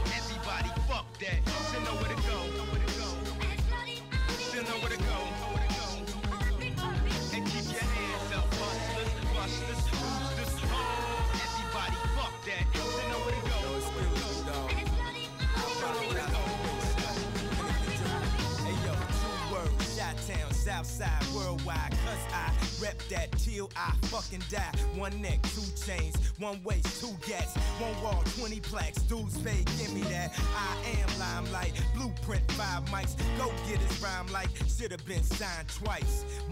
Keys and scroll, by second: 9.0 space, 10.2 space, 14.4 space, 19.7 space, 20.2 space, 29.1 space.